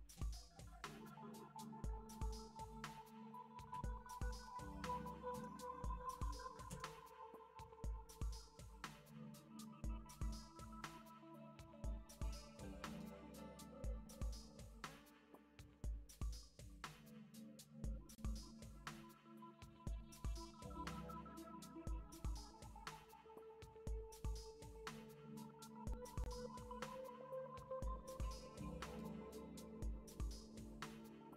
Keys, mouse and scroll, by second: 20.6 Return.